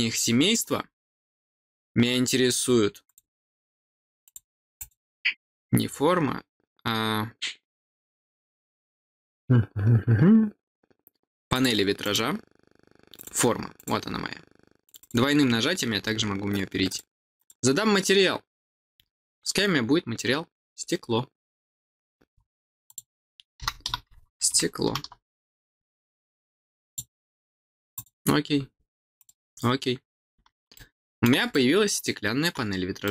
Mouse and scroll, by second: 0.8 middle click, 1.7-2.0 scroll down 1, 3.0 click, 4.2 click, 4.7 click, 5.5-5.9 scroll up 2, 8.2 middle click, 9.2 scroll down 2, 9.6 scroll up 2, 11.5 click, 12.0 click, 13.1 click, 13.7 click, 14.8 click, 14.9 click, 16.8 click, 17.3 click, 19.8 scroll up 1, 20.7-22.3 scroll down 7, 22.8 click, 26.8 click, 27.9 click, 29.1 click, 30.7 middle click, 31.4 middle click, 33.0 middle click.